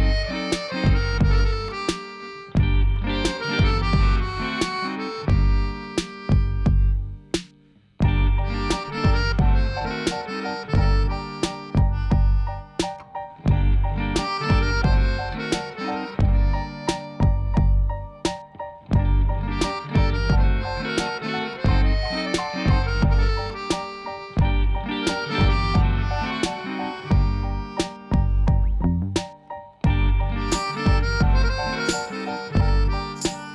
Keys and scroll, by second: 5.6 g, 5.9 z, 19.9 ctrl+alt+0, 22.2 g, 24.6 g.